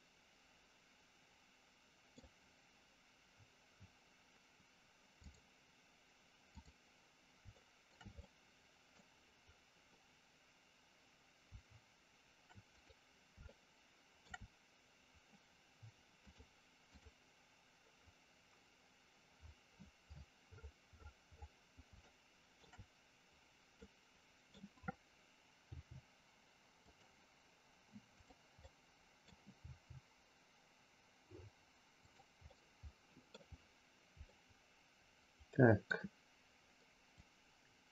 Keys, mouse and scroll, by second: 5.2-6.6 drag, 7.5 shift+middle click, 8.2 middle click, 12.8 click, 13.4 shift+middle click, 16.4 click, 22.0 shift+middle click, 23.7 middle click, 25.6 g, 28.1 click, 28.6 scroll up 1, 28.7 middle click, 29.6 g, 32.5 middle click, 34.4-35.8 middle drag, 37.2-37.9 drag.